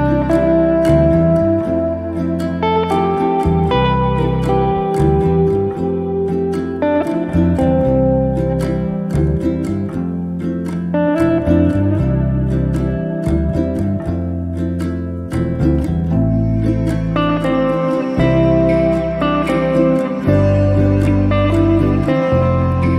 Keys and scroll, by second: 8.0 space, 16.6 t.